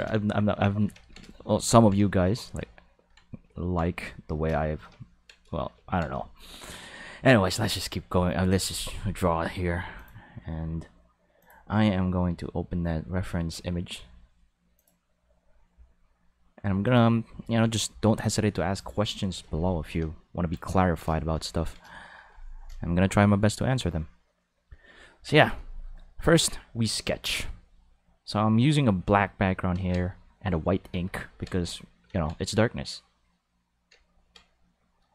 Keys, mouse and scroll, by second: 0.2 shift+middle click, 1.0 ctrl+middle click, 9.9 click, 11.4 click, 14.7 click, 16.8 click, 18.8 click, 28.5 click, 28.8 click, 30.2 click, 31.3 ctrl+z, 32.9 click.